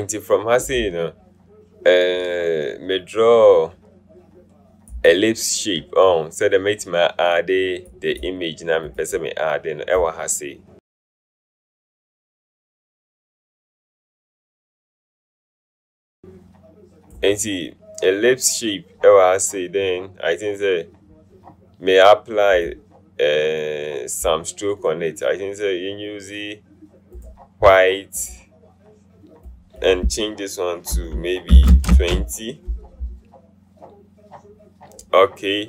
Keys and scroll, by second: 14.5 v, 31.8 KP_0, 32.1 Return.